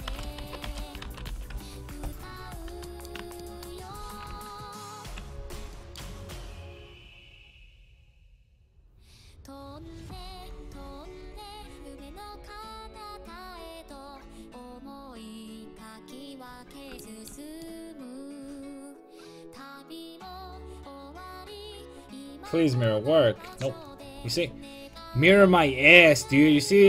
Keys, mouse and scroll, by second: 3.0-6.5 middle drag, 5.2 alt+o, 6.5-8.3 drag, 15.8-19.6 middle drag, 19.6-25.2 drag, 25.2 ctrl+z, 26.0-26.8 drag.